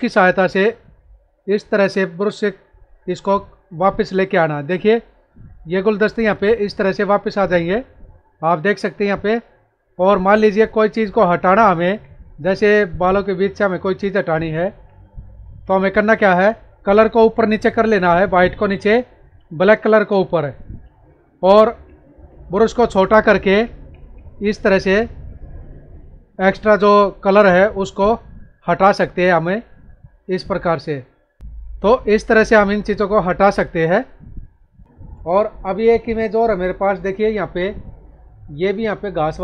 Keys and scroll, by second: 9.3 space, 14.6 ctrl+-, 15.2 ctrl+=, 27.6 space, 31.4 ctrl+-, 31.5 ctrl+=, 34.8 ctrl+-, 37.4 ctrl+=, 38.6 space.